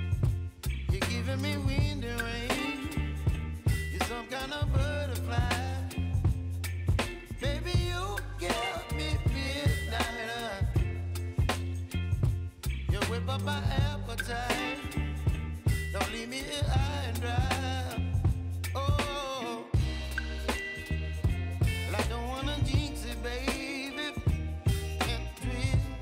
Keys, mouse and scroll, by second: 13.3 click, 14.0 u, 16.0 click, 18.4 ctrl+i, 19.7 click, 20.8 Return, 23.3-25.6 drag, 25.6 s.